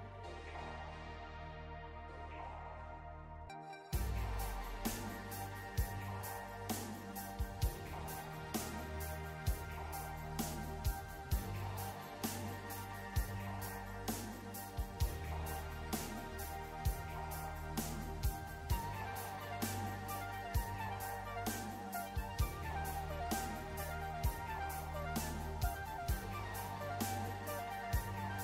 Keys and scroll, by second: 4.3 s, 23.2 ctrl+z, 23.4 ctrl+z.